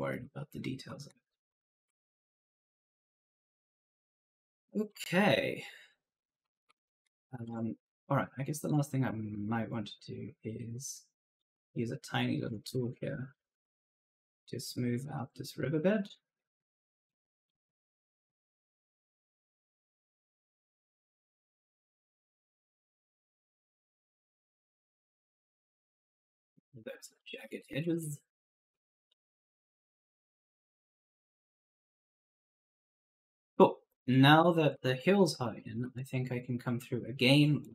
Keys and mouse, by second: 0.0-7.0 typing, 6.4 right click, 8.2 s, 8.5 click, 9.8 click, 11.3 click, 12.2-13.4 typing, 13.7 click, 15.7 click, 16.9 click, 19.0 right click, 19.7 click, 20.4-21.2 typing, 20.5 right click, 21.4 click, 22.0 right click, 22.5 click, 23.3 right click, 23.8 click, 24.6 right click, 25.2 click, 25.6-28.3 typing, 25.7 right click, 26.4 click, 27.0 right click, 28.3 click, 28.9 right click, 29.4 a, 29.7 s, 30.5 click, 31.2 right click, 31.4-35.3 typing, 31.7 right click, 33.9 right click, 37.5 click.